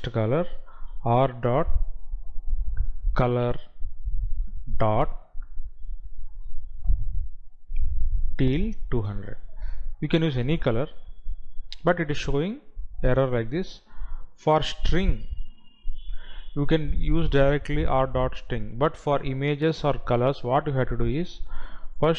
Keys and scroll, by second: 8.5 Down.